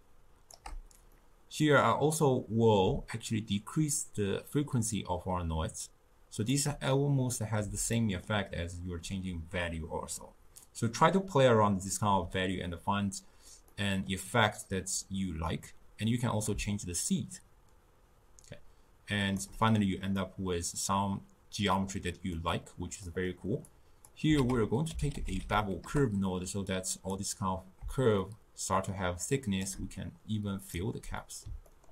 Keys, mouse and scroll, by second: 1.2-3.2 middle drag, 3.2-6.3 shift+drag, 8.0-11.0 middle drag, 13.8-15.8 middle drag, 15.8-18.8 drag, 20.2-23.8 middle drag, 23.8 click, 24.5 ctrl+a, 28.3-30.8 shift+drag, 31.3-31.9 middle drag.